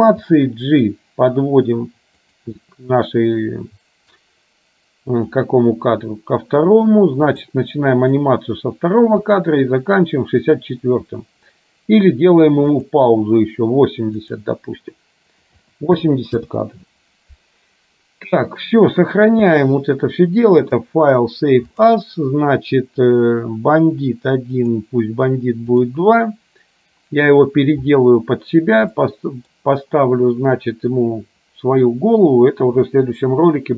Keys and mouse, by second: 0.4 g, 5.3 click, 7.4 click, 9.4 click, 12.9 click, 14.4-16.6 drag, 20.9-22.2 drag, 29.1 middle click.